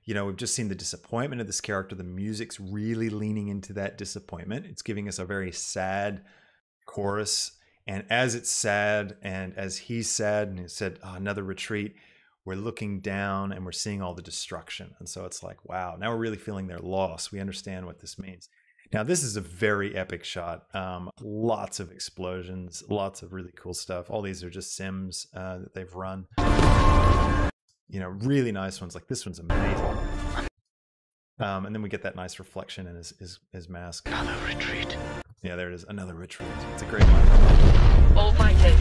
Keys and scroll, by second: 26.4 space, 29.7 space, 34.1 space, 36.3 space.